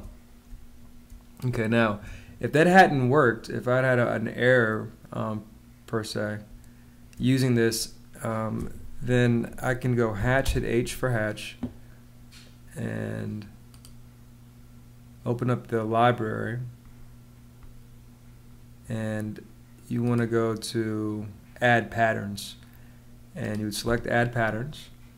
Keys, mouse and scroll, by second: 6.4 space, 10.0 h, 10.3 space.